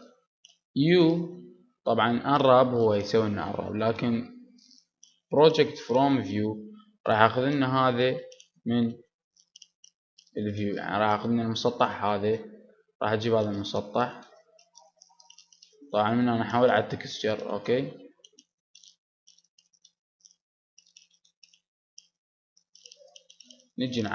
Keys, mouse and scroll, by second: 9.3-11.7 middle drag, 12.8 g, 14.0-15.7 drag, 14.0 s, 17.7 click, 18.1-18.6 scroll up 1, 19.0 Tab, 19.4-21.2 middle drag, 19.9 Tab, 20.7 s.